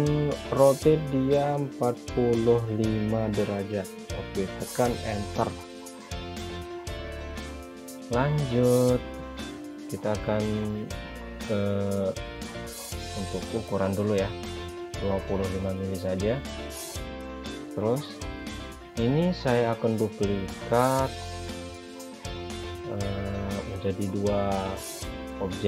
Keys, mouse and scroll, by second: 2.2 click, 3.9 typing, 5.6 Return, 8.2 click, 11.3 click, 13.3 typing, 16.0 Return, 23.8 click.